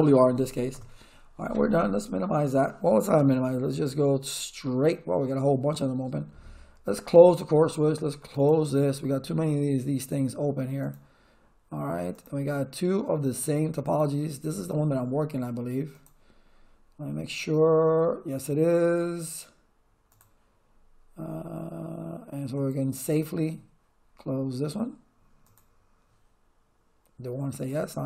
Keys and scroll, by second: 0.0-0.6 typing, 0.7 Return.